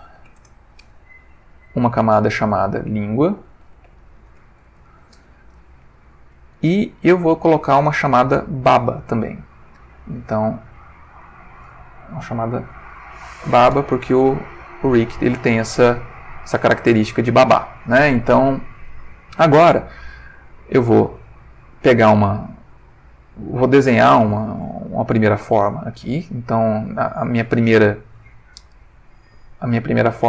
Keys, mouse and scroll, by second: 0.0-0.3 typing, 0.4 Return, 1.8 click, 2.5 click, 3.6-4.3 typing, 4.6 shift+Return, 9.3 click, 10.6 click, 11.2 click, 12.5 shift+b, 12.7 shift+a, 12.9 shift+b, 13.0 shift+a, 13.3 shift+Return, 14.9 click, 20.5 click, 23.2 ctrl+middle click, 24.2 ctrl+shift+middle click, 24.9 ctrl+shift+middle click.